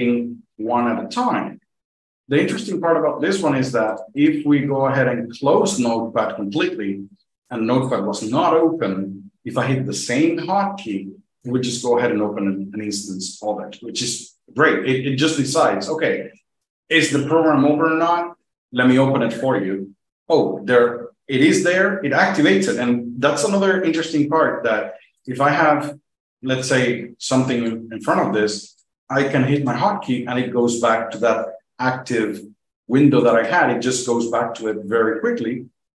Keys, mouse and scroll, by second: 0.2 F2, 0.6 F2, 3.8 click, 4.1 click, 4.5 click, 4.8 click, 5.4 click, 10.7 click, 10.8 F2, 25.1 click, 29.5 F2, 33.2 click, 33.2 F2.